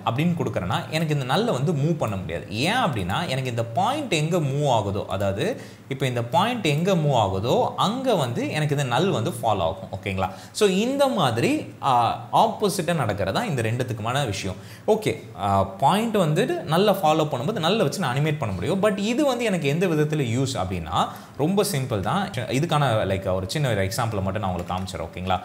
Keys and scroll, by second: 22.3 ctrl+z.